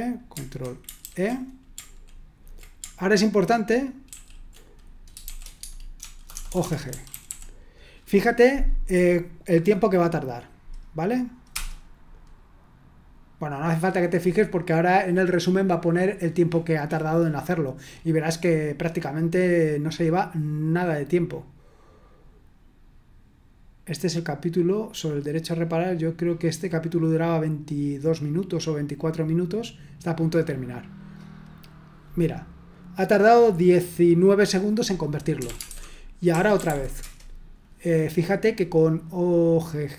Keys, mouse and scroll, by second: 1.0 ctrl+e, 4.1 ctrl+w, 5.3-7.7 typing, 5.6 Tab, 11.5 Return, 35.1-37.1 typing.